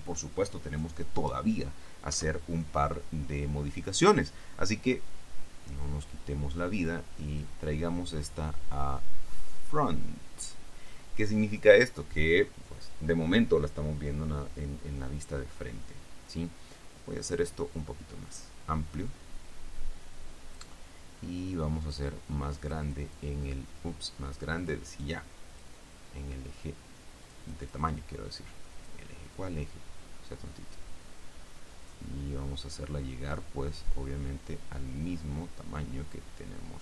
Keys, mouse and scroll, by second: 2.2 KP_1, 7.4 click, 9.8 click, 14.2-14.6 scroll down 1, 17.9-20.9 drag, 22.8 click, 24.8 click, 25.1 click, 25.6 click, 27.4-29.2 drag, 29.5-36.8 drag.